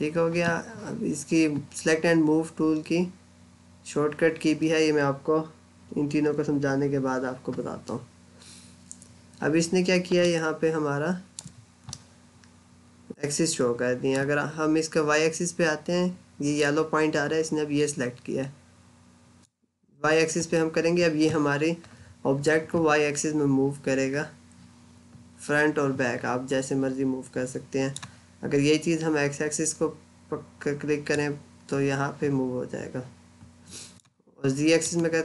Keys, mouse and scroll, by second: 10.1 middle click, 11.4 scroll up 1, 11.8 middle click, 19.3 click, 31.0 click.